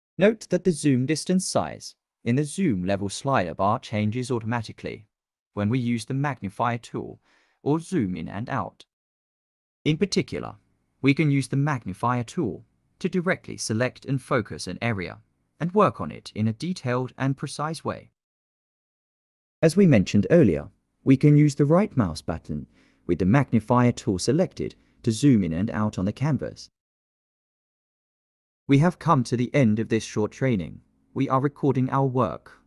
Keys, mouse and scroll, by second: 10.3 click, 10.5 click, 10.8 click, 11.7 click, 17.3 ctrl+middle click, 21.5 click, 21.7 right click.